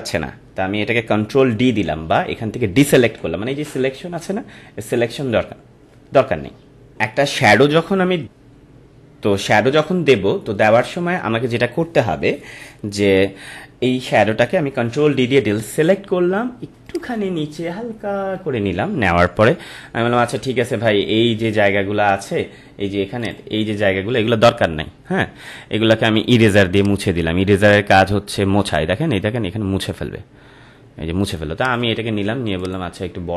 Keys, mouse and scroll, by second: 7.0 ctrl+m, 8.3 ctrl+m, 14.1 ctrl+m, 14.9 ctrl+d, 16.8 click, 17.2 Down, 20.1 ctrl+-, 21.7 ctrl+-, 23.2 click, 26.7 click, 31.6 click, 32.5 right click.